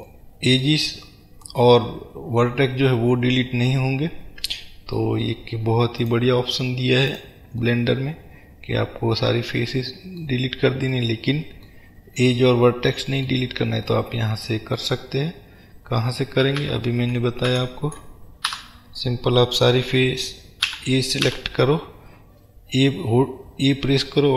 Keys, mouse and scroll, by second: 1.0 scroll up 1, 1.6-5.6 middle drag, 6.1 click, 7.1 click, 7.7-13.6 middle drag, 13.6-14.0 scroll down 2, 14.0-24.3 middle drag, 16.7 ctrl+z.